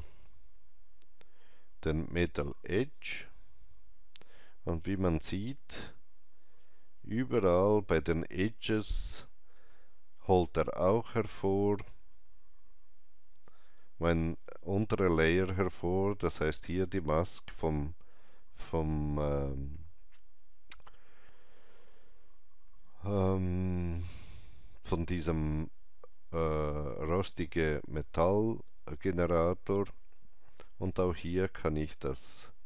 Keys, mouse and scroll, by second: 2.5-6.9 drag, 5.6 alt+right click, 6.9-16.6 alt+drag, 11.0 alt+middle click, 21.4-30.1 alt+drag, 21.4 alt+middle click, 23.1 alt+middle click, 32.0-32.6 alt+drag, 32.0 alt+middle click.